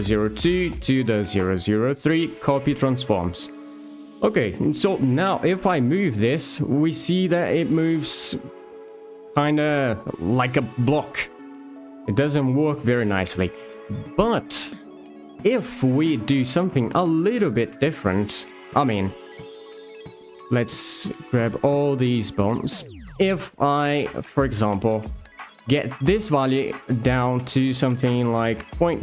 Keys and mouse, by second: 0.4 alt+shift+click, 1.9 d, 4.4 click, 5.0 shift+middle click, 5.6 r, 7.2 g, 9.6 r, 13.0 middle click, 19.6 alt+shift+click, 23.9 click, 26.3-29.0 alt+drag.